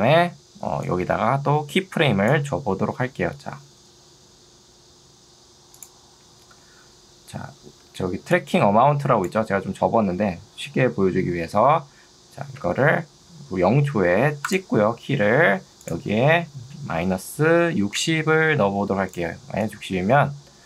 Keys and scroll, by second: 7.8 ctrl+2, 12.6 Escape, 17.6 0, 18.0 Return.